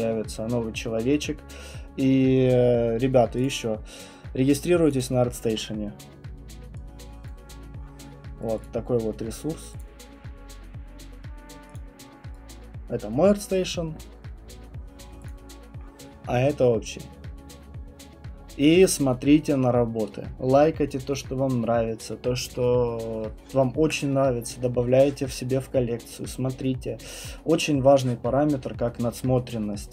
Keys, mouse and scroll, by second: 3.4 click, 4.9 click, 7.2 click, 8.6 click, 9.8 click, 11.7 click, 13.4 click, 14.8 right click, 15.8 right click, 17.2 scroll, 17.8 scroll, 18.2 middle click, 19.9 middle click, 21.0-21.9 scroll, 25.6 scroll, 26.6-27.8 scroll, 28.4 scroll, 29.0-29.9 scroll.